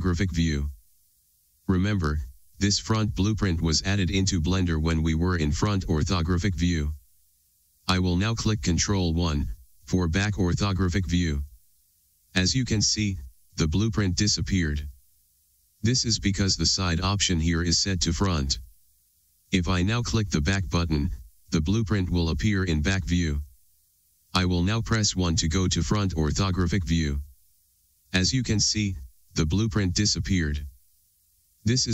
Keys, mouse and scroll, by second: 4.1-8.9 scroll down 1, 9.4 ctrl+KP_1, 21.0-26.4 drag, 26.4 KP_1.